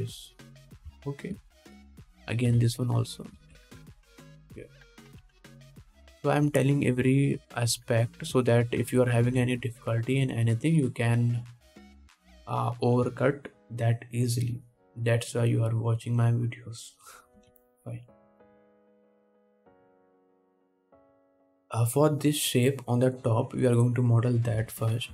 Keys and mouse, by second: 3.7 x, 4.7 ctrl+Tab, 6.5 KP_1, 6.9 ctrl+s, 10.7 ctrl+Tab, 18.6 KP_1.